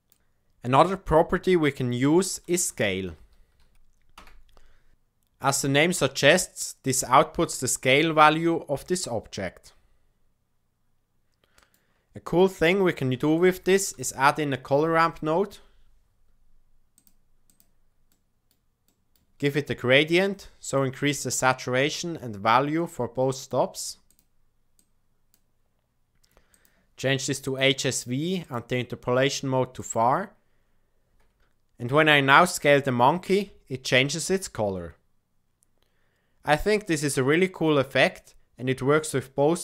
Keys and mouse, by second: 1.6-4.9 drag, 7.0 s, 12.4 click, 13.0 shift+a, 18.1 click, 23.3 click, 24.0 click, 26.5-27.5 drag, 28.4-29.9 drag, 33.3 s.